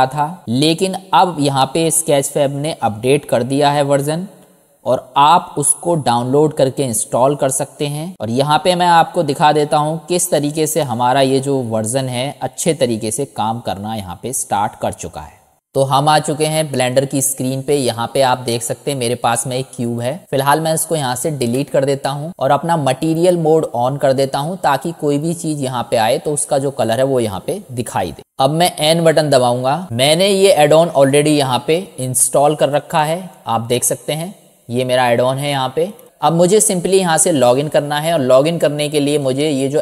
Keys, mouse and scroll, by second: 10.5-15.5 drag, 28.7 click.